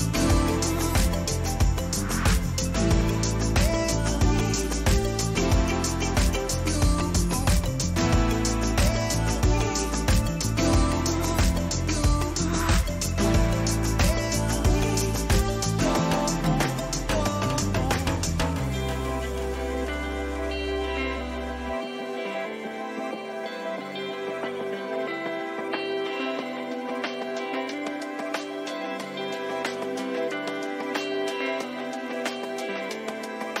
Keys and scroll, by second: 0.5 ctrl+-, 7.0 Return, 9.3 ctrl+t, 12.8 Return, 22.5 Caps_Lock, 22.9-24.6 typing, 23.0 Caps_Lock.